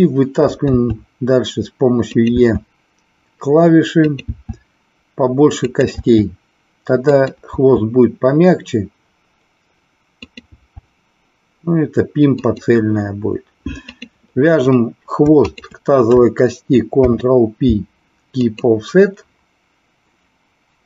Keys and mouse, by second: 0.7 e, 2.1 click, 2.3 e, 5.7 click, 7.1 click, 10.2 click, 10.6 e, 12.5 click, 13.8 click, 15.5 shift+click.